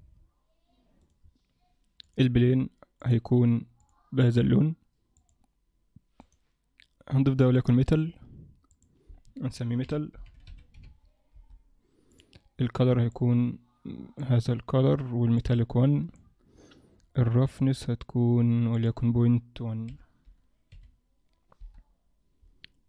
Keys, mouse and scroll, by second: 1.0 click, 2.0 click, 3.8 click, 4.0 click, 6.5 click, 8.8 click, 12.3 click, 15.5 click, 16.6-17.6 scroll down 6, 18.9 click.